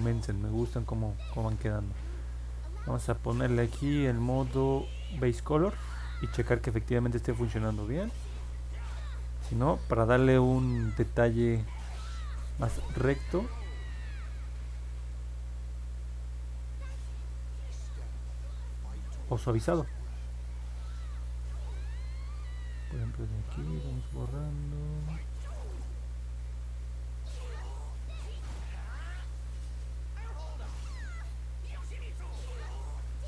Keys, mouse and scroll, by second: 14.9-20.2 drag, 22.8-32.6 drag.